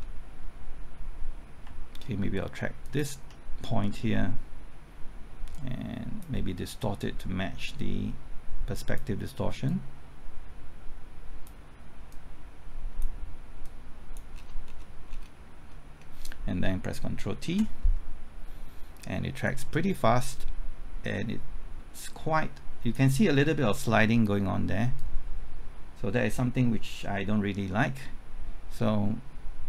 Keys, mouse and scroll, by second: 0.0 scroll up 1, 2.8 ctrl+click, 5.5-13.3 drag, 14.3 scroll down 1, 15.7-16.6 scroll up 1, 17.5 ctrl+t, 19.4-29.6 drag.